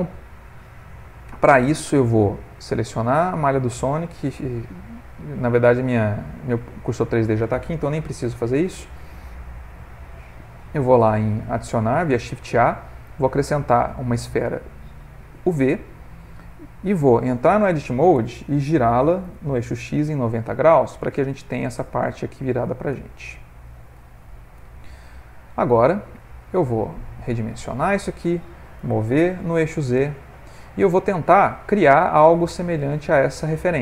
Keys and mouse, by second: 1.1 ctrl+middle click, 2.5 click, 4.2 shift+a, 8.1 shift+a, 15.6 ctrl+middle click, 15.7 ctrl+middle click, 17.4 Tab, 19.2 r, 22.9 Tab, 24.0 Tab, 24.6 Tab, 25.9 Tab, 26.1 s, 28.8 g.